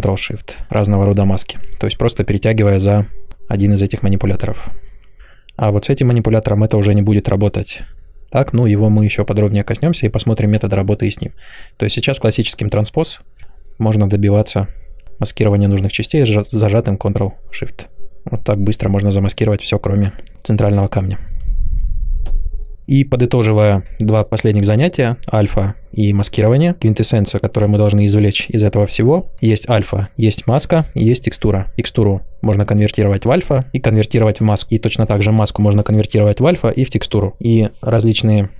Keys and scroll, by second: 5.2 ctrl+z.